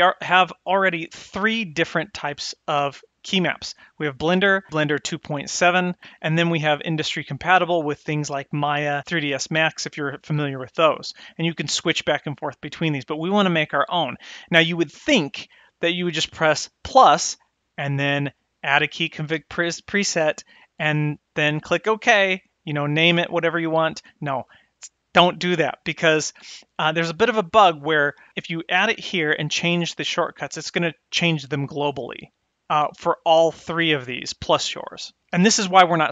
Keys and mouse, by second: 0.4-14.0 drag, 16.7-26.4 drag, 33.9-35.5 drag.